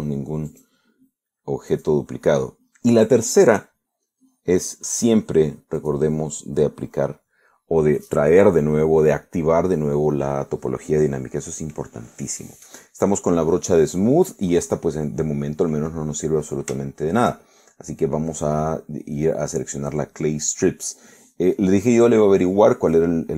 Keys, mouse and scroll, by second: 1.6 click, 2.8 click, 6.8 click, 15.9-17.4 middle drag, 17.9 shift+middle click, 18.9-20.0 middle drag, 20.1-23.3 middle drag.